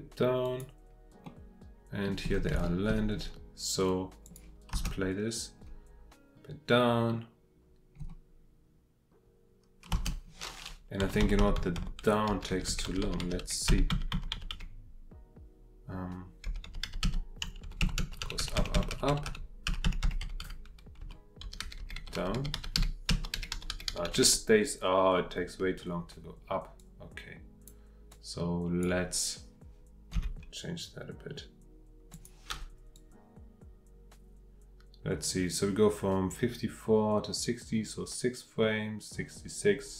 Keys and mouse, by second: 0.4 click, 1.2-2.1 drag, 2.6 shift+middle drag, 4.2 click, 4.7 space, 9.9 space, 11.0 Right, 11.2 Right, 11.4 Right, 11.6 Right, 11.8 Right, 12.3 Left, 12.5-14.1 Left, 14.3 Left, 14.5 Left, 16.5 Left, 16.7 Left, 16.8 Left, 17.0 Left, 17.4 Right, 17.6 Right, 17.8 Right, 18.0 Right, 18.2 Right, 18.4 Right, 18.6 Right, 18.8 Right, 18.9 Right, 19.1 Right, 20.0 Right, 21.4 Left, 21.6-23.3 Left, 23.5 Left, 23.7 Left, 23.9 Left, 24.1 Left, 24.2 Left, 26.8-27.7 drag, 28.1-28.9 drag, 30.1 g, 32.1 click, 32.9-39.9 drag.